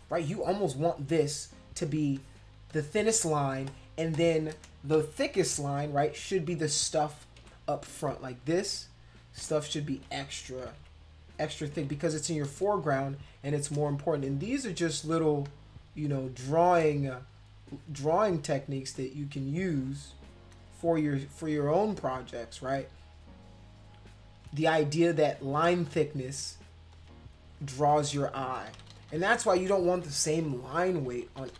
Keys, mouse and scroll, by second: 2.2 click, 2.7 click, 3.2 click, 3.7 click, 4.1 click, 4.9 ctrl+-, 7.4 [, 7.9 click, 9.4 [, 10.8 ], 11.7 ], 12.0 ], 12.4 click, 12.7 shift+scroll up 2, 13.3 shift+click, 13.9 click, 14.5 click, 15.0 click, 16.1 shift+click, 17.3 click, 17.7 click, 18.1 click, 18.4 click, 19.0 click, 19.8 click, 21.3 click, 22.7 click, 22.9 click, 23.3 click, 23.7 click, 24.9 click, 25.5 click, 25.7 space, 25.8 click, 26.9 click, 27.3 shift+click, 27.9 shift+click, 28.7 ctrl+z, 28.9 ctrl+z, 29.0 ctrl+z, 29.2 ctrl+z, 29.4 ctrl+z, 29.6 ctrl+z, 29.8 ctrl+z, 29.9 ctrl+z, 30.1 ctrl+z, 30.3 ctrl+z, 30.4 ctrl+z, 30.6 ctrl+z, 30.8 ctrl+z, 31.0 ctrl+z, 31.1 ctrl+z, 31.3 ctrl+z, 31.5 ctrl+z.